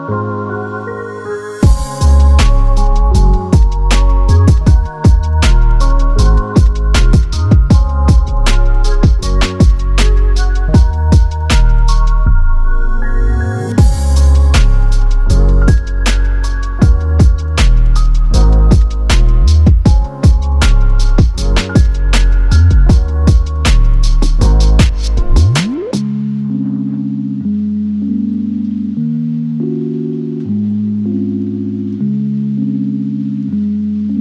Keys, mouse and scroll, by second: 2.0 click, 4.9 click, 10.0-10.4 typing, 10.9 click, 14.2-14.5 typing, 15.1 click, 24.4-29.6 drag, 30.3 scroll, 30.5-30.9 scroll down 1, 30.9 click, 32.5 right click, 33.5 click.